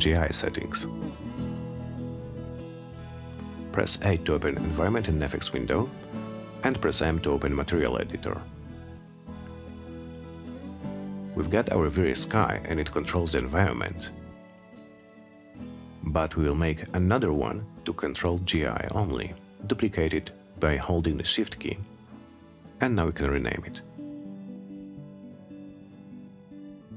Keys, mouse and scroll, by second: 1.1 8, 2.9-3.9 drag, 6.4 m, 7.8 click, 10.0 click, 10.2 click, 15.1 click, 15.9 click, 16.7-18.5 shift+drag, 19.5 click, 19.8 click, 21.7 click, 23.3 shift+g, 23.6 shift+i, 24.4 Return.